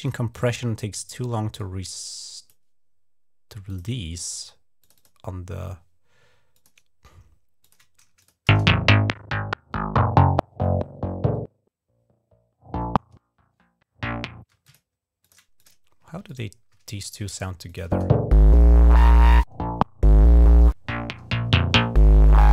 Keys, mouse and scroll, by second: 0.1 click, 0.3 click, 1.3 click, 3.5 click, 4.6 click, 4.8 click, 6.3 click, 7.4 click, 8.0 click, 8.3 space, 14.3 space, 14.4 click, 15.0 click, 15.4 click, 16.1 shift+click, 17.4 click, 17.6 space.